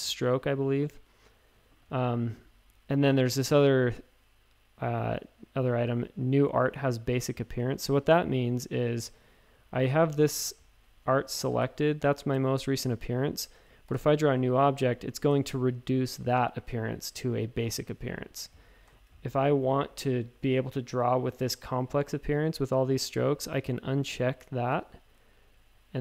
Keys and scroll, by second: 10.1 space, 11.6 shift+super+a, 13.8 i, 18.4 a, 18.8 BackSpace, 19.0 a.